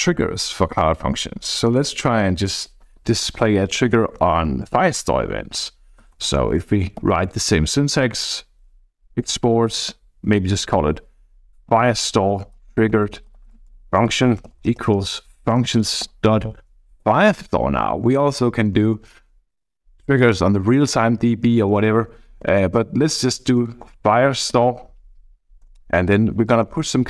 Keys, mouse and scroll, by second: 5.8-7.5 typing, 11.3-16.5 typing, 17.0 Down, 18.2 Down, 18.4 Down, 18.6 Down, 18.7 Down, 19.0 Down, 19.1 Down, 19.6 Down, 20.1 Up, 20.4 Down, 20.6 Down, 20.7 Down, 20.9 Down, 21.5 Up, 21.6 Up, 21.8 Up, 21.9 Up, 22.1 Up, 22.2 Up, 22.4 Up, 22.6 Up, 22.8 Up, 23.8 Return, 24.6 ., 25.6 Return, 26.6 Left, 26.8 Left, 27.0 Left.